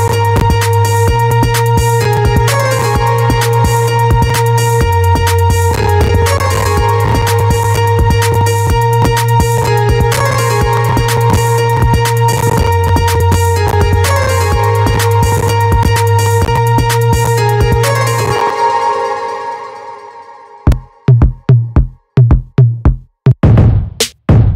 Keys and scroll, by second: 18.1 space.